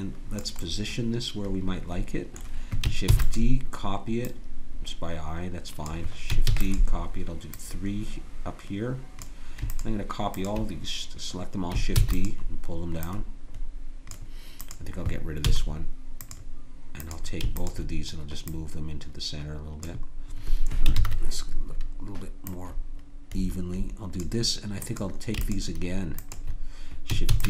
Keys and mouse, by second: 3.1 shift+d, 4.2-6.3 drag, 6.5 shift+d, 7.5-12.5 drag, 11.9 shift+d, 13.1 click, 15.5 x, 18.9-20.1 drag, 22.4-24.2 drag, 24.8-27.4 drag, 27.3 shift+d.